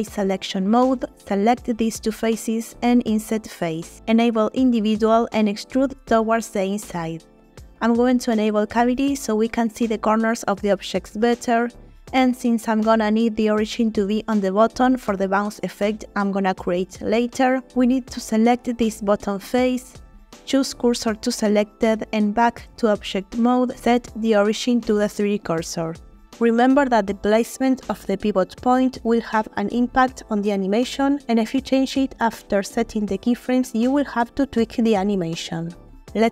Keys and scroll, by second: 1.6 shift+i, 5.2 e, 18.7 3, 21.1 shift+s, 22.4 Tab.